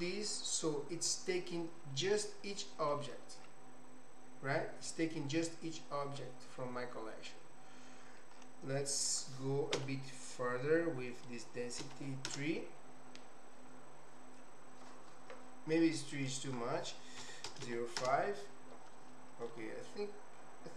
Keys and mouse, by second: 2.6 middle click, 8.9-15.2 drag, 16.1-18.8 drag, 19.4-20.7 middle drag.